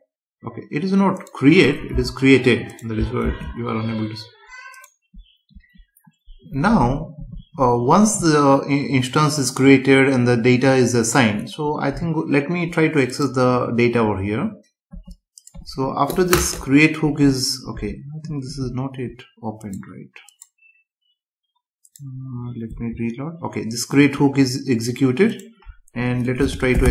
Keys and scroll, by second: 3.2 ctrl+s, 17.7 Right, 22.7 F5.